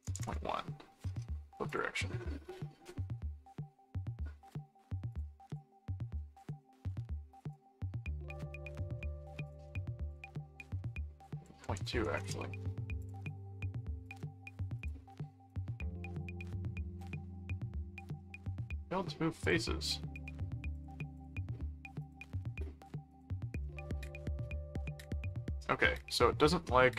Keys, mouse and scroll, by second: 1.7 click, 2.2 middle click, 5.1 click, 6.2 middle click, 7.4 click, 8.9 middle click, 9.5 click, 9.6 middle click, 10.1 click, 11.2 click, 13.0 click, 14.0 click, 14.8 click, 15.5 click, 16.1 right click, 17.0 click, 18.2 middle click, 19.4 click, 20.1 click, 21.0 click, 22.0 click, 23.1 click, 23.6-24.7 middle drag, 26.8-26.9 middle drag.